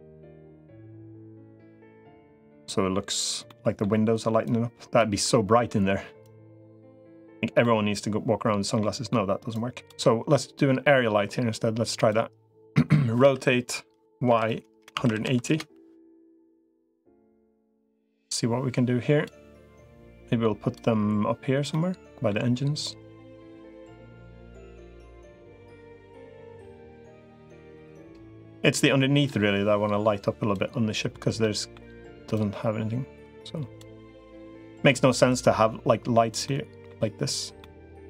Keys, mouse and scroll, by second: 0.5 click, 1.5 middle click, 3.3 middle click, 4.3 click, 5.0 middle click, 6.1-7.1 drag, 7.4-8.9 middle drag, 9.3 click, 13.1 r, 16.6 middle click, 17.9-19.1 drag, 19.9 click, 21.5 middle click, 22.7-24.1 drag, 24.1 middle click, 25.5 click, 26.9 click, 27.6 middle click, 29.1-30.3 drag, 31.2 middle click, 32.3-33.7 drag, 33.8 middle click, 34.7-36.1 drag, 36.3 middle click, 37.4 middle click.